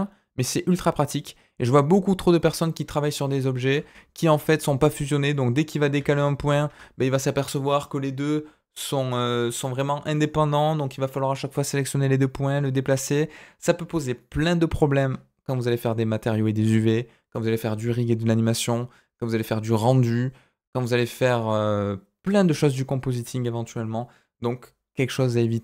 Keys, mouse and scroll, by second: 2.6 scroll down 2, 2.9 middle click, 3.2 scroll up 2, 3.5 shift+middle click, 4.2 click, 5.3 click, 5.9 g.